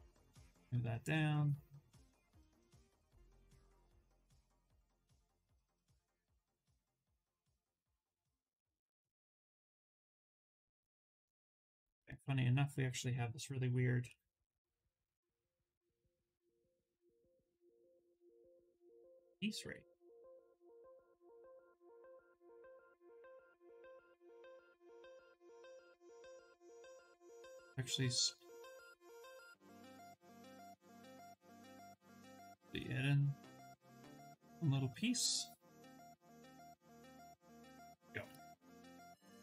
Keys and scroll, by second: 6.8 ctrl+z, 10.6 s, 22.0 2, 22.9 2, 24.2 Escape, 27.3 2, 30.0 shift+d, 31.2 2, 36.0 d.